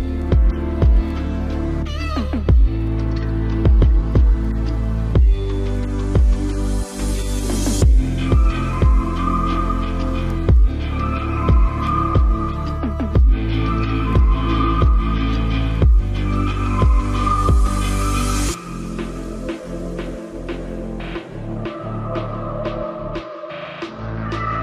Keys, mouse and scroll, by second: 0.7 s, 1.4 r, 2.1 click, 3.1 e, 5.6-6.6 middle drag, 7.9 r, 8.7 e, 9.8 r, 11.5 e, 13.7 r, 15.4 KP_Decimal, 17.4 e, 19.0 r, 20.0 e.